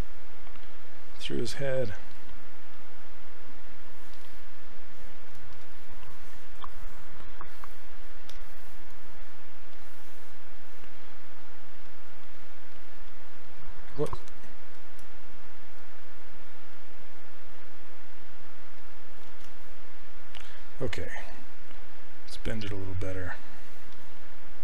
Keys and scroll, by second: 14.1 q, 14.9 w, 19.3 ctrl+z.